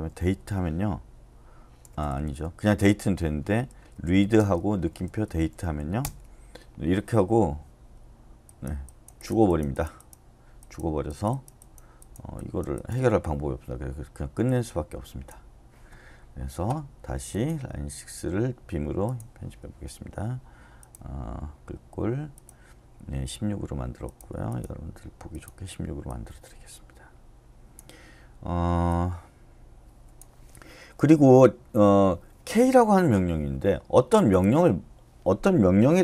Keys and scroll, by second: 0.0-0.6 typing, 1.8-4.4 typing, 5.6 e, 6.0 Return, 11.1 typing.